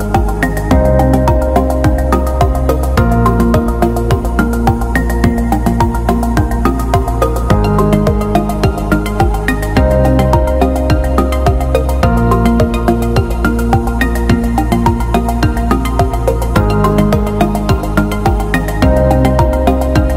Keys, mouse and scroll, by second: 0.6 click, 3.8-5.3 typing, 5.3 Return, 6.2 click, 6.9-8.5 typing, 8.6 Return, 9.6 click, 10.0 scroll up 1, 11.6 click, 16.2 click.